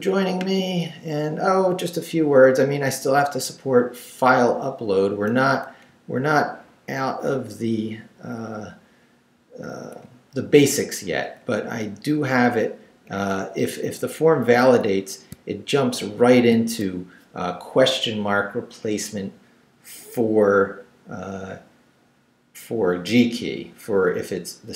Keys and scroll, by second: 1.9 Up, 5.9 Down, 10.0 Up, 11.4 Up, 13.8 Up, 14.6 Down, 15.3 shift+Down, 16.1 shift+v, 16.7 shift+Down, 17.6 Down.